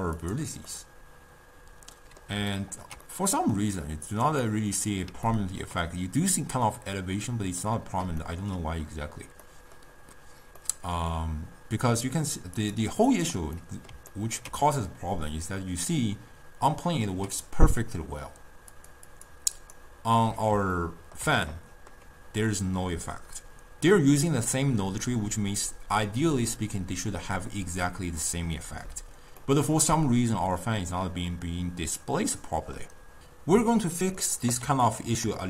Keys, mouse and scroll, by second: 0.3 click, 0.3 scroll up 1, 0.6 scroll down 1, 0.8-4.3 middle drag, 4.3 click, 5.4-12.3 ctrl+middle drag, 12.3 click, 12.7 click, 13.2 click, 13.7-17.8 middle drag, 18.8 click, 19.2 click, 19.7 click, 20.8-24.6 ctrl+middle drag, 29.5-32.6 middle drag, 34.2-35.4 middle drag.